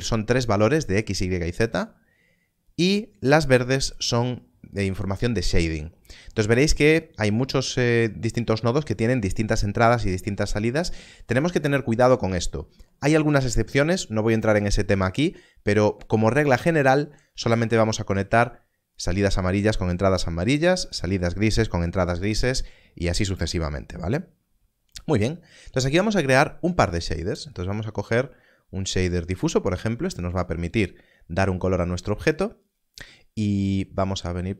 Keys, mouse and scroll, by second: 18.9 click, 26.1 shift+a, 29.3 click, 33.6 click.